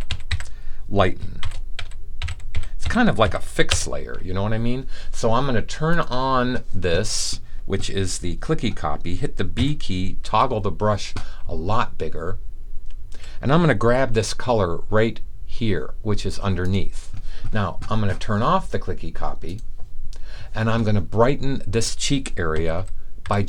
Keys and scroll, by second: 0.0-3.7 typing, 9.4 typing, 10.5-13.1 typing, 22.5-23.2 typing.